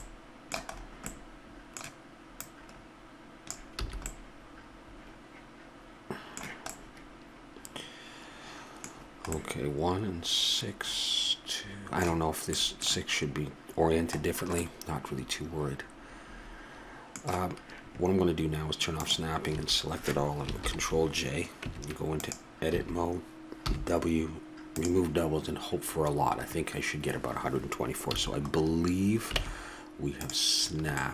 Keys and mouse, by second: 2.4-3.4 middle drag, 3.4-4.2 drag, 3.8 a, 4.2 middle drag, 8.4-9.3 middle drag, 11.2-12.6 middle drag, 15.3-15.8 middle drag, 16.7-19.0 middle drag, 19.0-20.8 drag, 19.5 a, 20.6 ctrl+j, 21.6 Tab, 22.7 a, 23.6 w, 28.1 a, 29.3 ctrl+Tab.